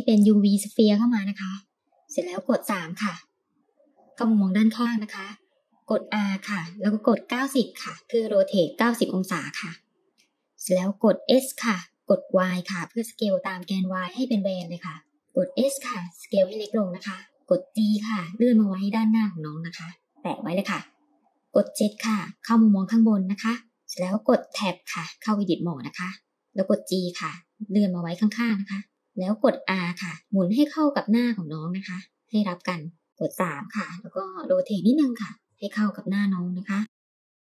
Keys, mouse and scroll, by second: 3.0 KP_3, 5.8 r, 11.4 s, 15.2 s, 17.7 g, 21.3 KP_7, 25.0 Tab, 26.2 g, 29.0 r, 33.1 middle click, 33.2 KP_3, 34.4 r.